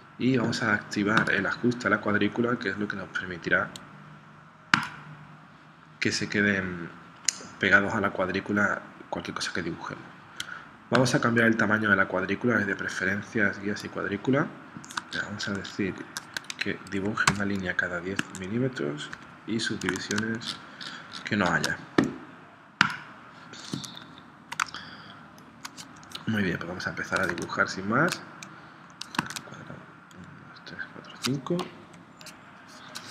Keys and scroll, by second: 24.7 space, 27.3 super+Tab, 29.2 super+Tab, 31.9 p.